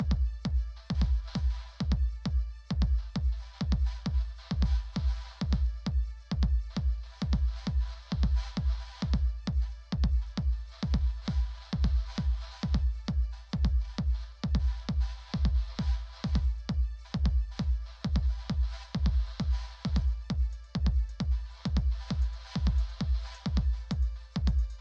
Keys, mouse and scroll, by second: 0.0-1.8 typing, 0.5 Return, 3.2-10.2 typing, 11.6 typing, 15.0-16.3 typing, 18.8-19.8 typing, 21.2 typing, 21.9 Return.